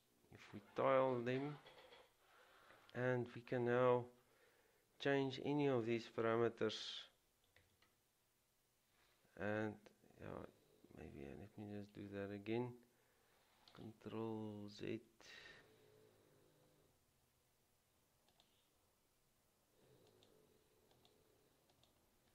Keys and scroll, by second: 7.4-8.2 typing, 15.3 ctrl+z.